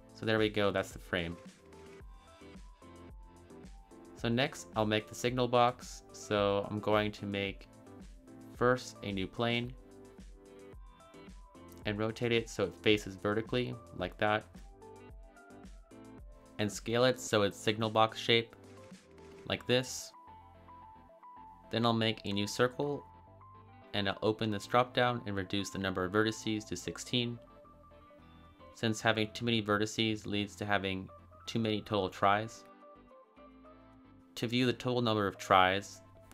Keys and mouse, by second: 1.3 click, 2.2 a, 2.3 a, 3.3-5.4 middle drag, 7.4 shift+a, 11.0 r, 11.5 x, 12.3 9, 12.5 0, 12.9 Return, 15.3-16.1 shift+middle drag, 16.8 s, 18.0 x, 22.2 shift+a, 24.7 click, 26.3-29.6 drag.